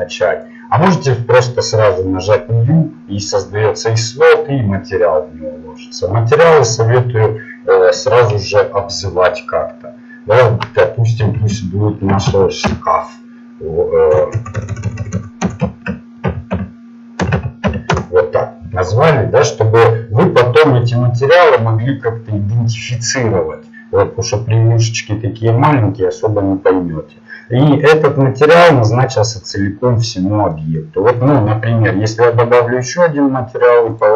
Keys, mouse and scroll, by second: 17.9 BackSpace, 21.0-27.1 drag, 28.4-29.9 middle drag.